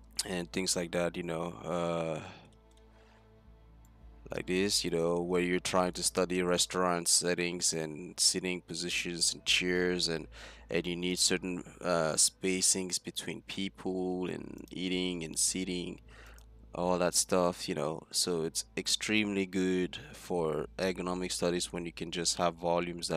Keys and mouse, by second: 4.0 middle click, 8.5-10.0 middle drag, 11.8 middle click, 12.4 middle click, 13.9-15.0 middle drag, 15.8 middle click, 16.5 middle click, 20.4-23.1 middle drag.